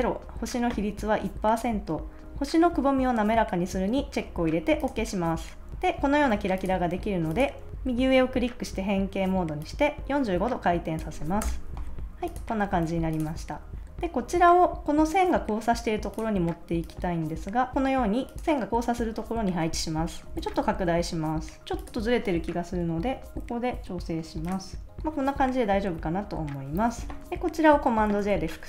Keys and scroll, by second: 11.4 Return, 12.8 super+s, 23.0 Left, 23.3 Right, 25.8 super+-, 26.9 super+s, 28.2 super+j.